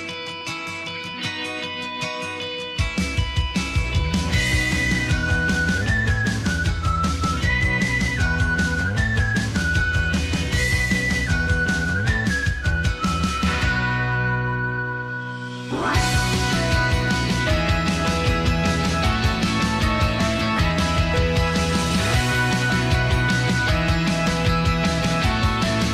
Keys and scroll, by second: 2.0 d.